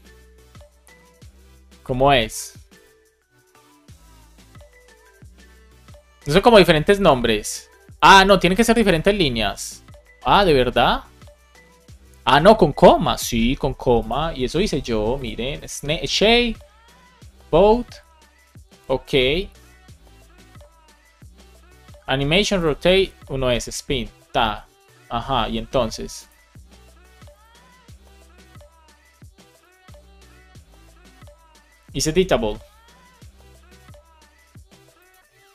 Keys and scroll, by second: 16.2 super+Right.